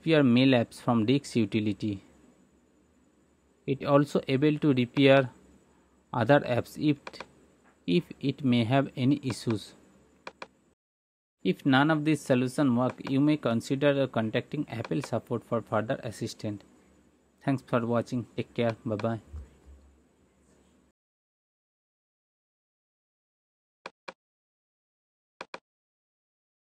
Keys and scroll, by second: 1.6-2.9 typing, 3.6 Return.